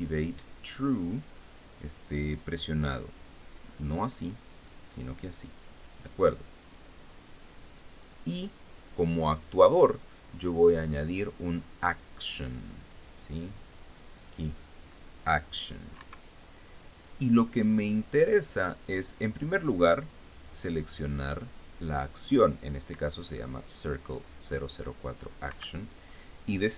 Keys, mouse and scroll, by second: 3.6 click, 5.3 click, 7.4-8.9 drag, 9.9 click, 10.4-11.6 drag, 14.1 click, 14.9 click, 16.7 Escape, 18.1-19.4 drag, 20.0 click, 26.2 Escape.